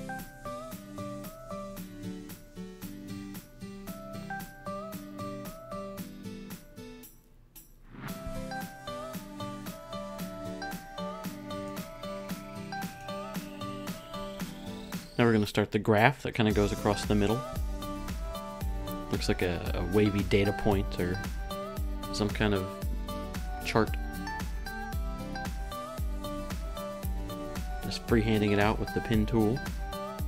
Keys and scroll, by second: 0.4 BackSpace, 1.1 Return.